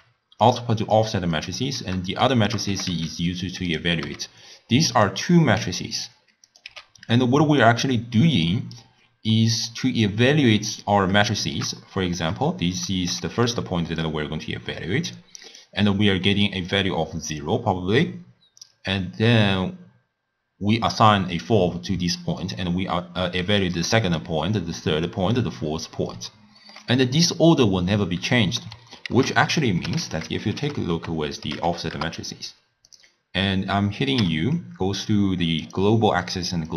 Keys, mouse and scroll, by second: 1.0 click, 2.2 shift+right click, 2.8 g, 4.1 g, 6.5 click, 6.9 x, 7.6 click, 8.7-9.3 scroll up 2, 9.3-12.4 middle drag, 12.4 scroll up 2, 12.5 scroll down 1, 13.6 d, 14.0-15.6 drag, 15.6-26.7 typing, 16.7 click, 23.7 click, 24.6 click, 25.4 click, 29.1 ctrl+a, 30.1 f, 34.2 u.